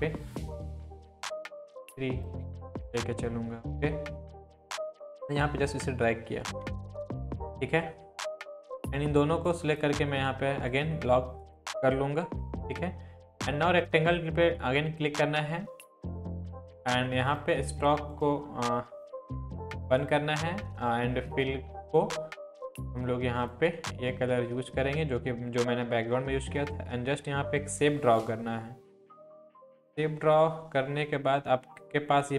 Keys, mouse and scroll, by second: 5.0 Down, 7.1 Right, 9.5-10.1 shift+drag, 22.7 click, 26.6-30.0 drag, 30.7 scroll down 1.